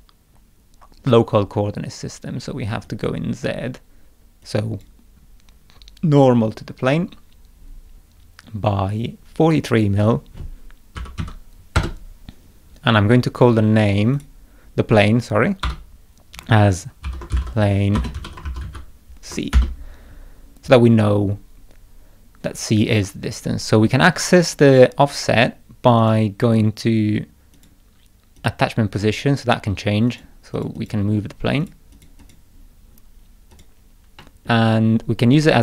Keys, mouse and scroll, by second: 2.9 click, 4.5 click, 8.0 scroll down 1, 9.5 middle click, 14.2 click, 15.7 F2, 16.8-19.1 typing, 19.5 Return, 26.0 click, 27.6 click, 28.4 click, 30.1 click, 30.6 click, 30.8 click, 31.6 click, 31.9 click, 32.2 click, 33.5 click, 34.2 middle click.